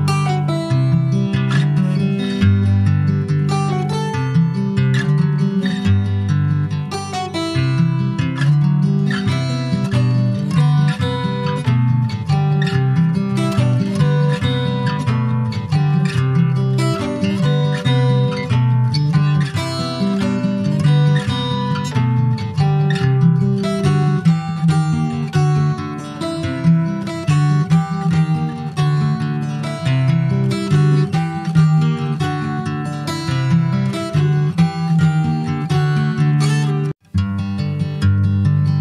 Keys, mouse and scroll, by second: 1.6-2.6 drag, 2.9-3.4 scroll down 4, 3.7-6.7 drag, 7.5-8.4 scroll up 9, 8.4 click, 9.2-12.3 drag, 12.5-15.6 drag, 16.7-19.8 drag, 20.3 Tab, 20.5 click, 20.7-21.0 scroll down 4, 21.0 middle click, 21.4 ctrl+s, 21.5 click, 21.8-23.2 right drag, 23.2 shift+middle click, 24.1 ctrl+s, 24.6 click, 25.5-26.5 drag, 26.7 click, 26.8 scroll down 4, 27.1 middle click, 27.6 ctrl+s, 27.9 shift+middle click, 28.8 ctrl+s, 29.1 shift+middle click, 29.4 scroll up 2, 29.7 middle click, 30.0-30.9 scroll up 1, 30.9-31.4 scroll up 1, 31.4 click, 31.6 Tab, 32.0 shift+middle click, 32.4 scroll up 3, 32.7 middle click, 33.0-34.1 shift+middle drag, 34.1 click, 34.5 middle click, 35.1 3, 35.3 click, 36.5 alt+shift+click, 37.0-38.1 middle drag, 38.1 click.